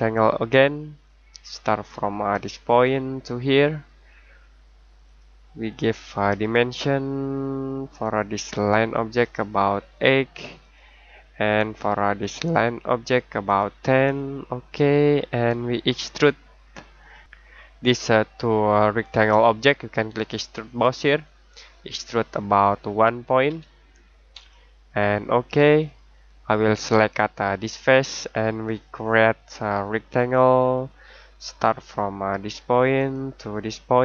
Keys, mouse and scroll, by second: 0.0-0.9 scroll down 1, 0.9 click, 9.7 8, 10.6 click, 20.8 click, 24.3 click.